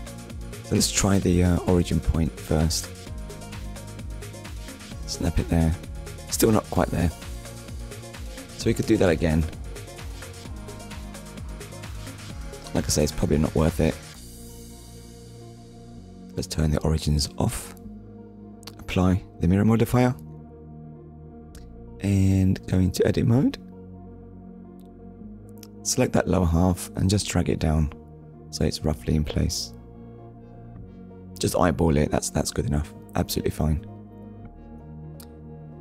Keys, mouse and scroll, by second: 1.5 click, 2.1 shift+middle click, 2.7 scroll up 1, 3.8 click, 4.3 ctrl+click, 5.5 shift+middle click, 6.6 scroll up 1, 7.6 scroll down 1, 9.0 shift+middle click, 10.8-11.2 scroll up 1, 13.2 click, 15.3 click, 16.1 click, 18.8 click, 19.6 click, 22.4 click, 23.0 click, 24.0 click, 24.9 click, 25.5 shift+middle click, 26.3 click, 27.3-28.1 scroll up 3, 29.1 click, 32.6-33.1 scroll down 2, 33.6 shift+middle click, 34.9 Tab.